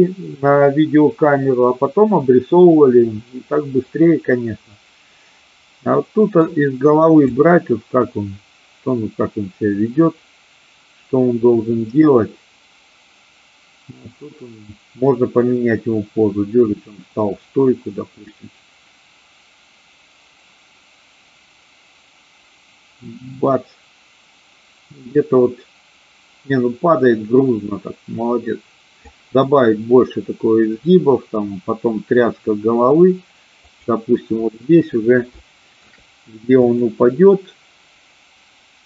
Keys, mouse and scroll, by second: 5.9 middle click, 7.3-29.1 drag, 33.6 click, 35.4 shift+middle click, 36.5 click.